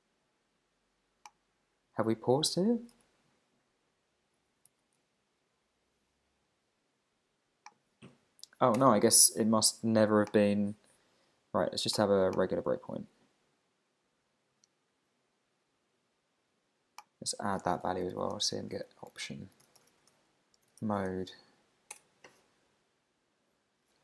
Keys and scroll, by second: 2.7 alt+Right, 3.0 alt+shift+Left, 4.7 super+c, 8.1 super+v, 8.8 Return, 19.1 shift+o, 19.9 shift+9, 21.1 shift+0, 21.9 Return.